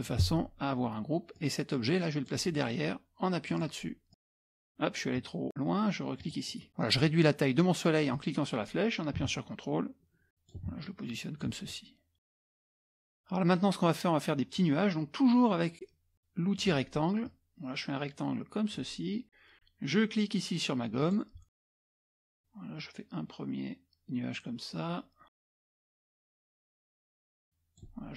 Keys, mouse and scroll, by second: 1.4-2.6 drag, 3.5 click, 4.1 click, 6.2 click, 8.1 click, 9.8 ctrl+click, 10.9 click, 12.3 click, 16.6 click, 17.3-19.1 drag, 21.0 click, 21.8-28.0 drag.